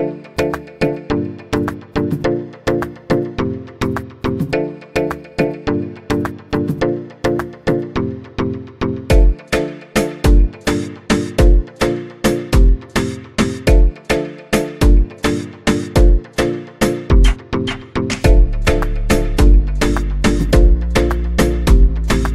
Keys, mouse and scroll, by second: 0.3-1.8 drag, 1.8-2.7 scroll down 1, 2.7-3.7 drag, 3.7-4.9 scroll down 1, 4.9-5.9 scroll down 1, 5.9-8.9 scroll down 2, 10.1-11.6 scroll down 1, 11.6-14.6 drag, 15.0 click.